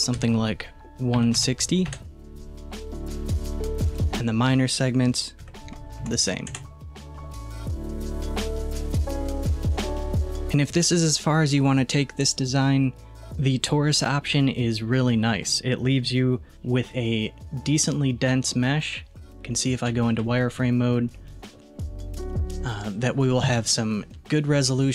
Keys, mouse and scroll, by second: 3.9-7.1 drag, 8.4-9.2 scroll down 1, 15.5-19.9 middle drag, 19.9 z, 21.0-21.3 scroll up 1, 21.3-24.9 shift+middle drag.